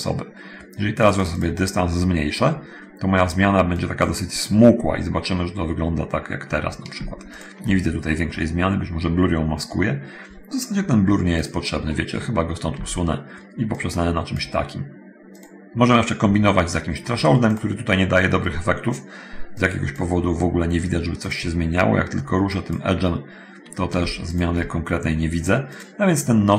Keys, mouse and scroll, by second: 1.3 click, 3.6 click, 7.5 ctrl+shift+middle click, 11.6 middle click, 12.1-12.5 scroll up 1, 12.5 x, 13.9 middle click, 17.7 click, 19.8 click, 21.5 click, 22.7 click.